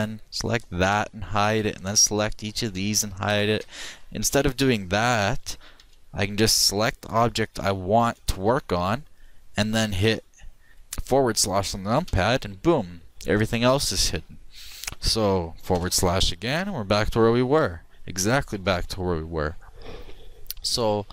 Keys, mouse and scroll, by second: 0.6 right click, 0.9 h, 2.8 h, 2.9 right click, 3.6 h, 5.9 h, 12.1 KP_Divide, 15.2 middle click, 15.8 KP_Divide, 16.5 middle click, 19.0 middle click.